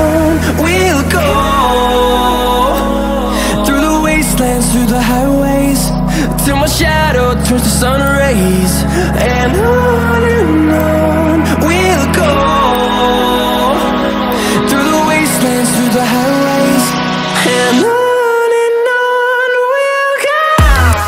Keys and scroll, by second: 18.1 ctrl+z.